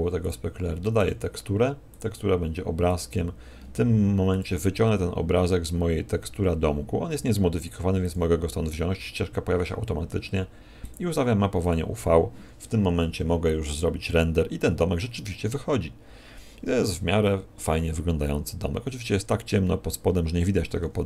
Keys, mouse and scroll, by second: 1.0 click, 3.0 click, 12.2 click, 20.4 Escape.